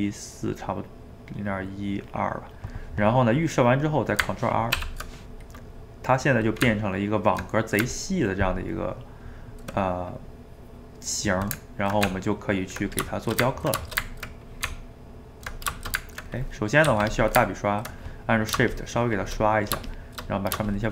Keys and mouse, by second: 4.9 ctrl+r, 5.6 middle click, 6.6 Tab, 7.9-12.1 ctrl+middle drag, 12.1 Tab, 13.3-14.7 shift+middle drag, 14.7 Tab, 15.8-16.8 ctrl+shift+middle drag, 16.8 f, 17.4-18.8 ctrl+middle drag, 18.8 shift+click, 19.4 middle click, 19.9 shift+click, 20.3 middle click, 20.7-20.9 shift+drag.